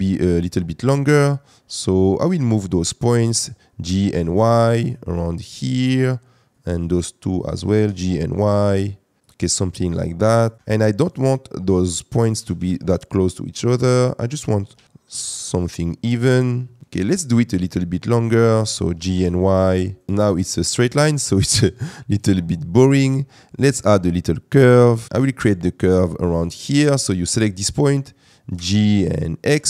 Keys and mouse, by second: 2.3 click, 3.8 g, 4.1 y, 5.0 click, 7.6 g, 7.8 y, 10.6 Escape, 10.6 g, 10.6 y, 12.4 g, 12.6 y, 13.4 click, 14.3 click, 14.7 g, 14.8 y, 15.6 click, 18.9 g, 19.1 y, 21.1 middle click, 22.8 click, 24.9 click, 25.1 g, 25.1 y, 25.2 middle click, 28.5 g, 29.4 x.